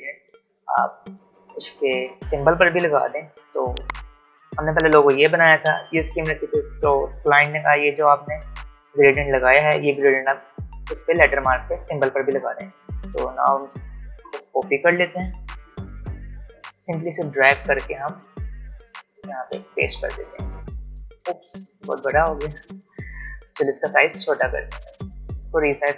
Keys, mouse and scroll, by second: 3.1 click, 14.1 click, 17.0-21.4 drag, 21.4 alt+scroll down 1, 23.9 alt+shift+click.